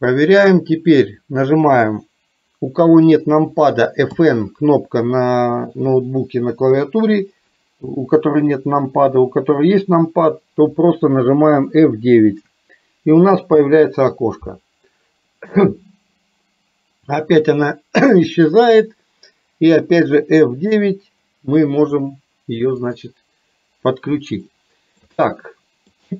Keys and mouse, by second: 24.5 shift+middle click, 25.4 middle click.